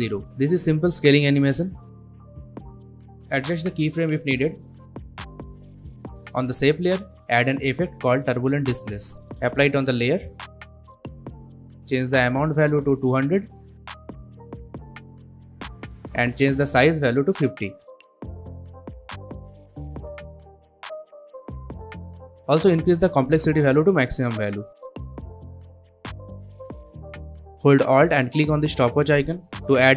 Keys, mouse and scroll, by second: 7.8-8.9 typing, 9.9 click, 13.5 click, 15.1 Return, 16.2 click, 17.5 Return, 19.3-21.2 drag, 26.3-27.9 drag.